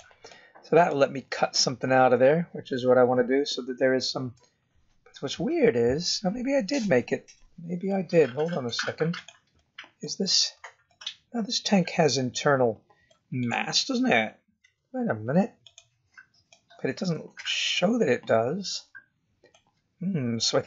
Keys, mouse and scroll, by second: 0.2 middle click, 0.2 scroll down 1, 1.0-1.5 scroll down 5, 1.5 middle click, 4.5-5.7 scroll up 5, 5.7-6.8 scroll down 2, 6.8 middle click, 8.3 g, 9.5 middle click, 10.2-10.5 scroll up 2, 10.8 middle click, 13.4 click, 13.7 scroll down 2, 14.6 z, 16.6 middle click.